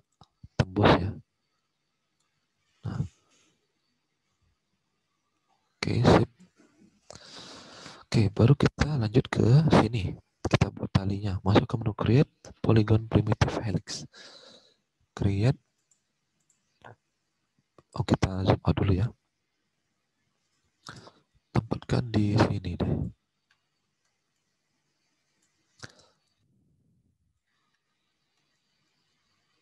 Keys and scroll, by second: 6.6 alt+Tab, 13.3 alt+Tab, 17.5 Escape, 18.3 Escape.